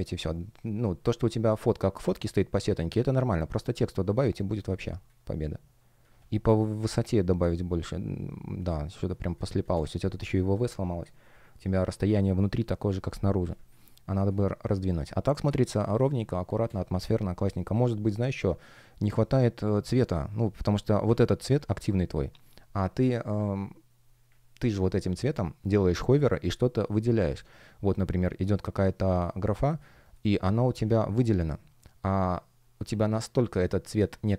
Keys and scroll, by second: 0.0 shift+o, 4.7 space, 6.9 shift+p, 10.6 F1, 13.4 space, 15.9 space, 30.3 space.